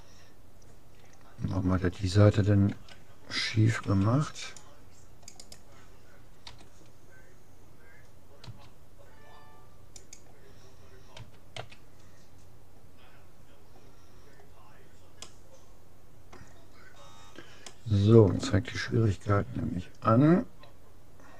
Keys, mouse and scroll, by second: 2.7 a, 4.0 c, 6.6 g, 11.2 a, 11.6 a, 14.4-16.4 middle drag, 19.3 s, 19.4 click.